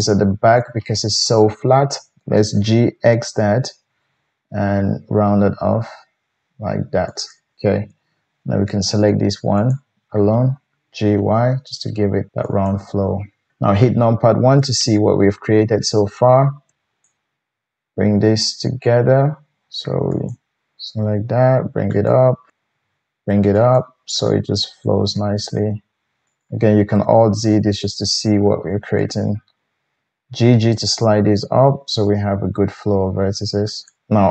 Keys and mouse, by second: 0.0 shift+middle click, 0.0 shift+right click, 2.6 g, 8.8 shift+middle click, 8.8 shift+right click, 10.9 g, 13.5 KP_1, 17.8 g, 20.1 click, 20.1 middle click, 20.1 right click, 20.3 click, 20.9 g, 22.1-22.5 drag, 22.6 g, 23.8-24.4 drag, 25.1 g, 26.5-34.3 alt+drag, 26.9 alt+z, 30.2 g.